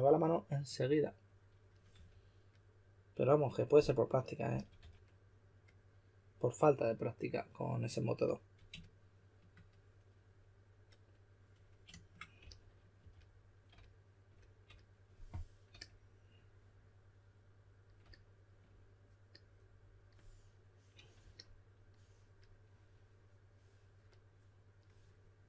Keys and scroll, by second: 1.7-2.4 typing, 4.5 typing, 12.4-13.5 typing.